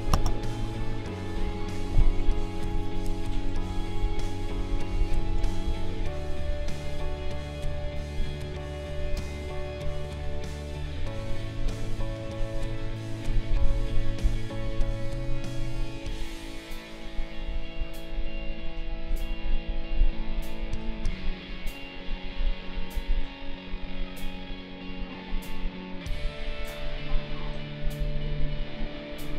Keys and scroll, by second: 0.2 space, 4.5 space.